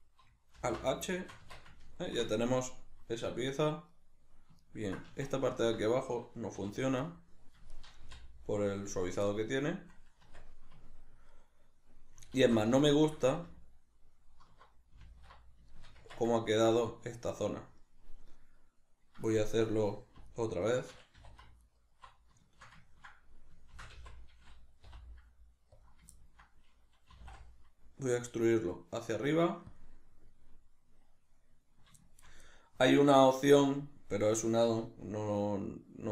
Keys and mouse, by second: 0.6 alt+h, 1.4 Tab, 5.1 Tab, 6.6 3, 6.7 right click, 6.9 middle click, 7.7 shift+right click, 8.0 x, 9.3 middle click, 10.2 Tab, 10.8 ctrl+middle click, 12.4 alt+q, 12.8-20.3 shift+middle drag, 13.5 alt+q, 16.0 Tab, 20.3 alt+right click, 21.2 2, 21.7 alt+right click, 22.4-25.9 shift+middle drag, 23.7 shift+d, 25.9 click, 26.1-27.2 ctrl+middle drag, 27.2 e, 29.8 click, 32.0-36.0 shift+middle drag.